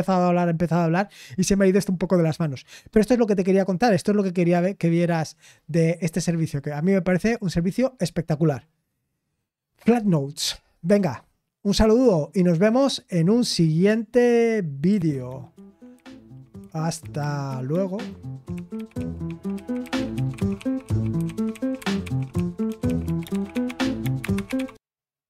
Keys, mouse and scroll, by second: 14.8 super+x.